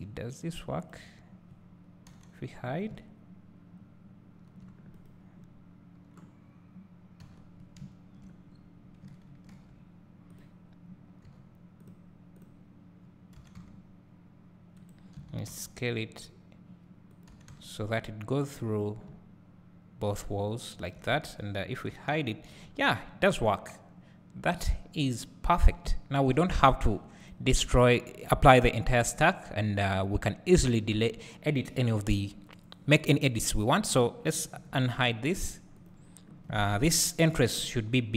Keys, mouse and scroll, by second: 1.0 click, 2.1 h, 2.7 scroll down 2, 3.1 `, 5.1 click, 5.4 scroll down 2, 7.3 h, 8.5 scroll up 1, 9.6 alt+h, 10.5 click, 11.4 h, 11.9 click, 12.5 click, 13.5 g, 15.0 right click, 15.3 s, 17.2-19.5 drag, 17.4 g, 19.1 `, 19.7 click, 20.4-21.9 drag, 21.9 h, 22.7 scroll down 2, 29.5-34.7 scroll up 2, 34.7 alt+h, 35.4 click, 35.9 click, 36.8 KP_1.